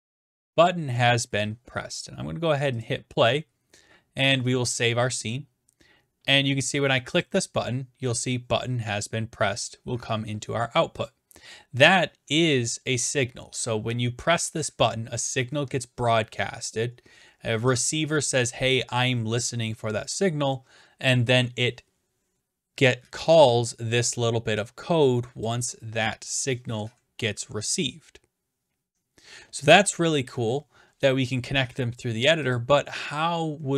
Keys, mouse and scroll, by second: 0.0-0.6 typing, 1.5-2.4 drag, 2.8-3.9 drag, 4.6-5.7 drag, 7.2-8.2 drag, 11.1 click, 11.6 click, 23.4 click, 25.4 click, 32.5 click.